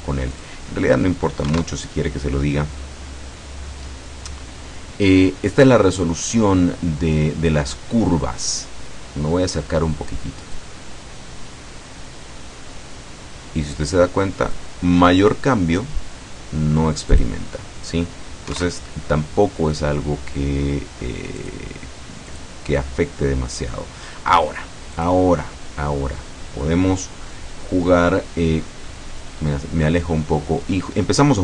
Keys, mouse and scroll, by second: 0.4 click, 1.5 KP_1, 10.6-14.8 drag, 17.1 click, 18.5 KP_1, 19.0 KP_Enter, 21.5 click, 22.3 click, 23.2-24.1 scroll down 2, 24.1 scroll up 1, 24.5 scroll down 1, 25.0 click, 28.6-29.1 scroll down 1, 29.4-29.7 scroll up 1.